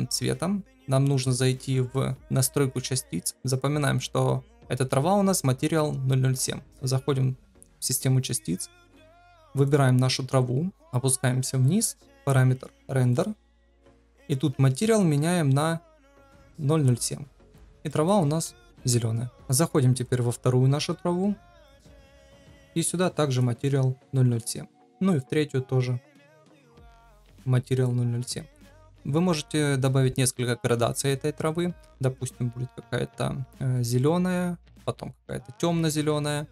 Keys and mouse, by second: 13.1 click, 15.0-16.6 drag, 17.9 middle click, 22.6-23.8 drag, 27.0-28.1 drag.